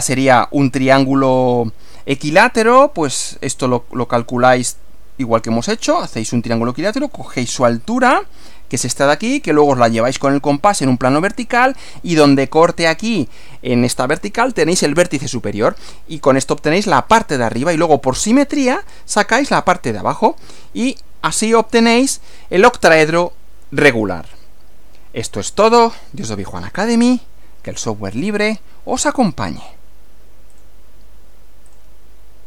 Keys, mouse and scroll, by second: 19.9 Right, 20.4 Left, 21.5 Left, 30.6 click, 31.7 click.